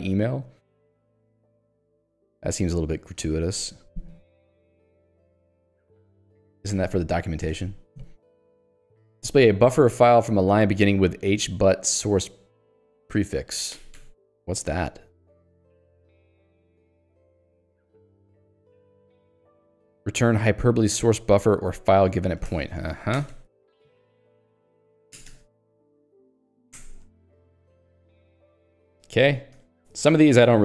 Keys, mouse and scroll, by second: 0.6 j, 4.6 ctrl+d, 5.3 ctrl+u, 6.1 ctrl+d, 6.8 ctrl+u, 7.3 ctrl+d, 8.3 j, 9.3 k, 11.3 l, 15.0-17.4 typing, 22.6 ctrl+g, 23.6-25.3 typing, 26.5 :, 26.9 Return, 29.6 q, 29.9 Escape.